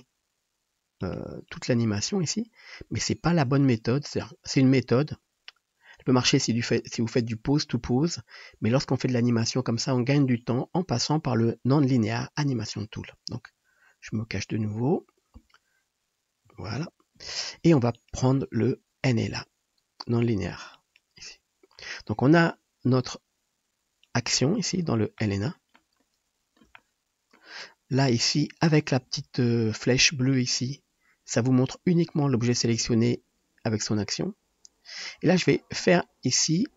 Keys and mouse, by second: 1.2 middle click, 1.5-14.4 drag, 3.7 ctrl+z, 4.2 ctrl+z, 14.5-30.4 drag, 14.5 [, 16.4 BackSpace, 30.4-32.0 middle drag, 32.0 click, 32.2-36.7 middle drag.